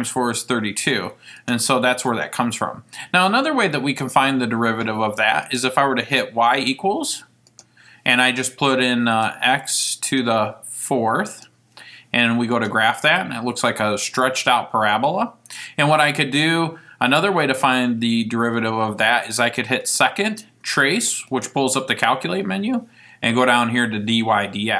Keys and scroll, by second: 1.5 Return, 9.2 x, 10.2 ^, 11.5 4.